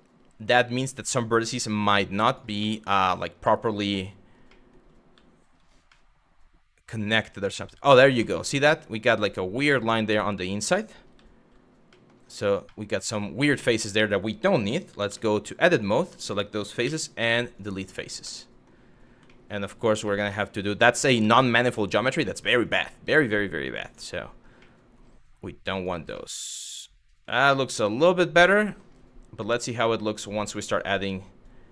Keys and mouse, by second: 1.9 click, 2.3-2.6 middle drag, 3.2 middle click, 3.4 z, 4.2 middle drag, 4.7 z, 5.6-7.5 middle drag, 7.9 shift+middle drag, 8.8-9.8 middle drag, 10.0 middle click, 10.8 z, 11.6 middle click, 12.4-13.1 middle drag, 14.7 Tab, 15.3 click, 16.5 x, 18.0 middle click, 19.0 middle click, 19.8 shift+middle click, 21.0 shift+middle click, 22.0 click, 22.2 shift+click, 22.6 x, 24.3 middle click, 25.4 click, 25.8-26.9 middle drag, 27.5-28.5 middle drag, 31.1 click.